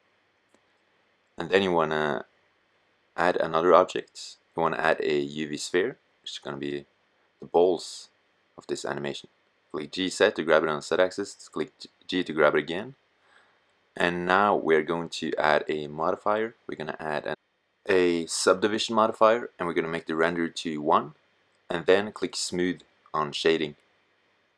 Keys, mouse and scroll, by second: 2.8 s, 3.3-5.1 drag, 5.1 middle click, 5.4 click, 7.4 g, 9.6 g, 18.2-19.6 middle drag, 22.8 middle click.